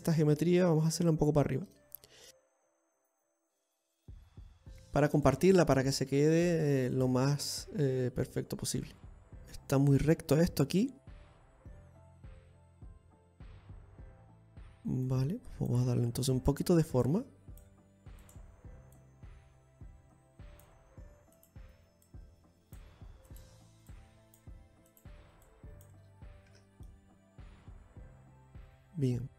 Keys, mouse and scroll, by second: 0.6 right click, 0.9 middle click, 2.3 click, 2.3 g, 3.7 middle click, 4.6 right click, 5.0 g, 6.4 right click, 6.7 g, 8.2 middle click, 9.3 Tab, 10.4-10.9 scroll up 4, 12.0 Tab, 12.8 middle click, 14.4 right click, 14.7 middle click, 15.8 click, 16.9 right click, 17.8 click, 18.9 right click, 19.6 click, 22.0 right click, 22.8 click, 24.0 right click, 24.6 click, 25.6 right click, 26.2 click, 27.2 Tab, 27.5 middle click.